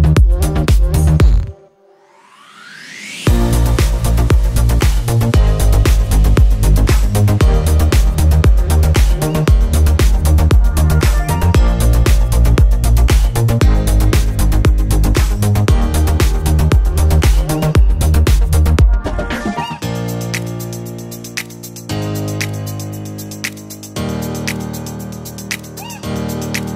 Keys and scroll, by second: 0.0-1.1 typing, 2.7 ctrl+Return, 3.2 v, 3.3 Left, 6.1 h, 6.6 g, 7.0 Return, 12.6 Return, 12.7 v, 12.9 Right, 14.0 Up, 15.4 ctrl+t, 15.8 Left, 17.1 Down, 18.1 Return, 19.9 ctrl+t, 20.4 Up, 23.1 Return.